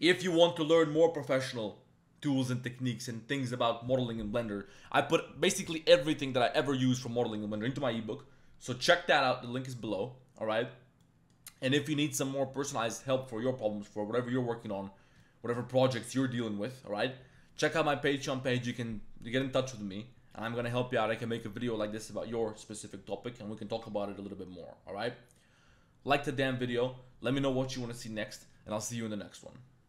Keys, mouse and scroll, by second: 4.7 middle click, 11.0 middle click, 12.1 middle click, 14.1 middle click, 15.2 shift+middle click, 15.9 middle click, 21.1 middle click, 25.0 click, 25.0 middle click.